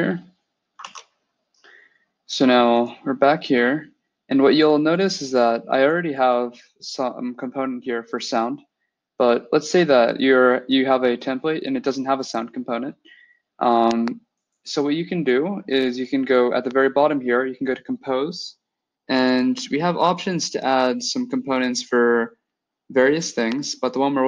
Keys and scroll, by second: 0.7 alt+Tab.